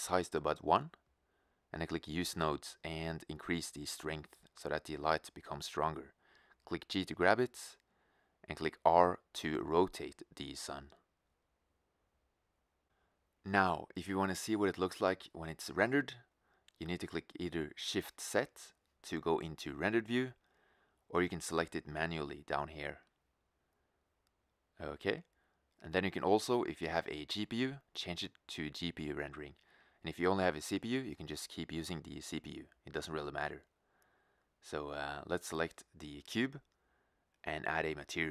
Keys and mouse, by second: 4.7 g, 8.3 g, 9.6 click, 10.4 r, 13.9 g, 19.3 shift+z, 21.1 shift+z.